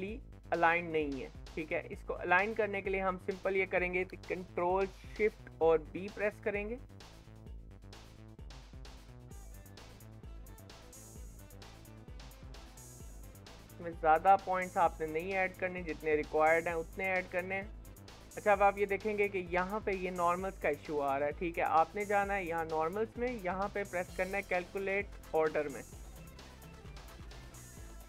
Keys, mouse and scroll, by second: 0.9-1.4 scroll down 4, 1.4 shift+middle click, 1.7-2.3 scroll up 5, 2.3 Tab, 2.7 1, 2.9 click, 3.3 scroll down 4, 3.5-5.7 shift+middle drag, 5.7 ctrl+shift+b, 17.6-19.1 middle drag, 19.1-19.6 scroll up 4, 19.6-21.8 middle drag, 21.8-26.1 drag, 26.1-26.5 scroll down 4, 26.5 shift+middle click, 26.7-27.1 scroll up 4, 27.1-28.0 middle drag.